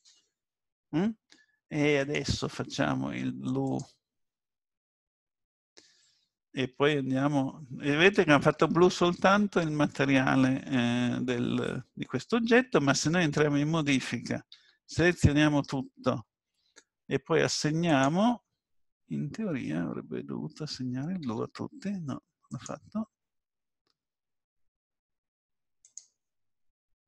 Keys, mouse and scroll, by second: 2.0 click, 12.9 Tab, 14.5 a, 15.0 a, 17.9 click, 21.3 Tab, 22.5 click, 25.8 click.